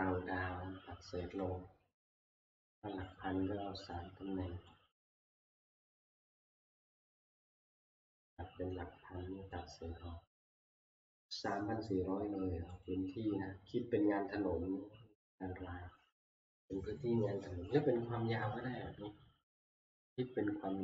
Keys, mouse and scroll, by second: 1.2 Escape, 2.4 click, 3.1 click, 5.0 click, 5.5 click, 6.9 click, 11.4 click, 12.9-17.9 drag.